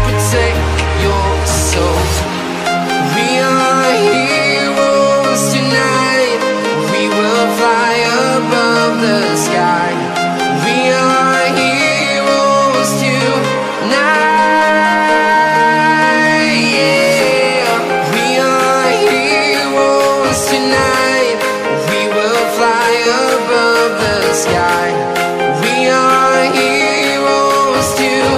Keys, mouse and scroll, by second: 2.4 right click, 3.1 click, 3.4-3.9 scroll down 1, 3.9 click, 4.3 ctrl+click, 4.6 ctrl+click, 4.9-5.4 scroll down 1, 5.5 ctrl+click, 5.7 right click, 6.6 click, 7.5-7.9 scroll down 1, 7.9 click, 8.5 Delete, 10.7 click, 11.8 alt+Tab, 12.8 click, 14.2 v, 15.1 click, 20.2 ctrl+Num_Lock, 20.2 click, 20.5 Left, 20.9 Down, 21.1 Left, 23.0 click, 26.0 right click.